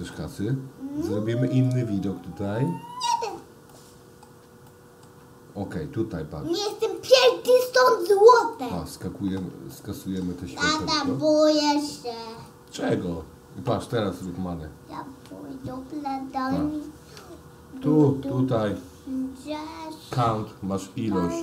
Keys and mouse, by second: 2.8 click, 3.7-4.3 middle drag, 4.7-5.1 shift+middle drag, 6.9 click, 7.9 click, 9.7-10.3 shift+middle drag, 10.8 middle click, 12.4 click, 17.8 d.